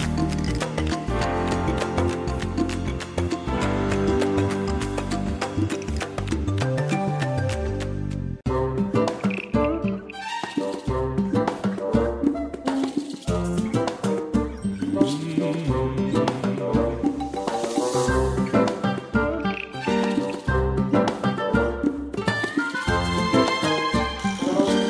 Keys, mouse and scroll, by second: 2.2 scroll down 1, 3.4 click, 5.8 shift+click, 9.1 space, 10.3 click, 14.0 shift+click, 16.7 scroll down 1, 17.5 click, 17.8 space, 19.2 click, 21.3 shift+click, 22.8 click, 24.5 ctrl+scroll down 1.